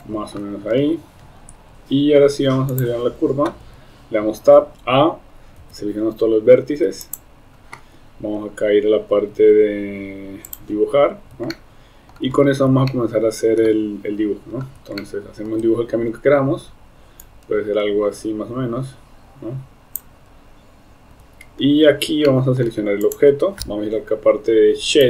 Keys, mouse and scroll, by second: 2.8 click, 3.7 Tab, 4.7 a, 5.6 x, 10.5 click, 11.6 shift+middle click, 12.9 shift+middle click, 15.1 shift+middle click, 17.2-20.1 drag, 21.2 Tab, 22.3 shift+middle click, 23.0 click.